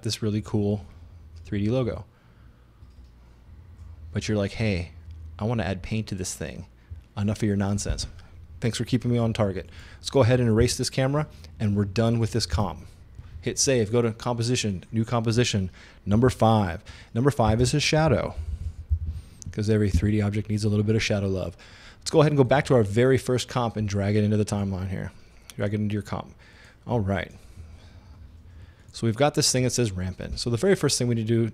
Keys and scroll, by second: 10.6 BackSpace, 12.6 super+s, 16.2 5, 17.5-19.6 typing, 20.0 Return.